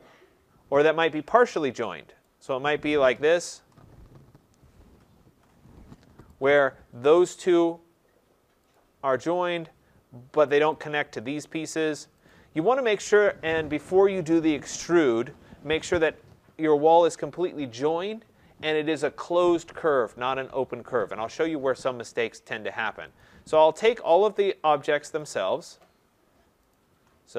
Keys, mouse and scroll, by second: 1.1 middle click, 1.2 middle click, 2.2 shift+click, 3.1-3.9 typing, 3.4 scroll, 6.2 click, 7.4 click, 9.1 click, 9.1 middle click, 10.0 middle click, 10.8 click, 10.8 middle click, 12.2 click, 23.2 click, 24.3 shift+click, 25.2 shift+click, 25.8 shift+click, 26.7 shift+click.